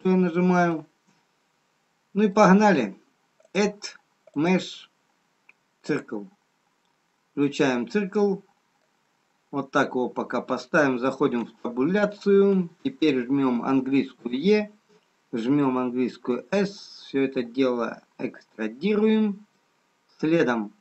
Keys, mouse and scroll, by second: 0.8 middle click, 0.8 scroll down 1, 4.0 click, 6.6 scroll up 1, 8.2 middle click, 8.2 scroll up 4, 12.6 Tab, 14.1 e, 20.1-20.8 scroll up 1.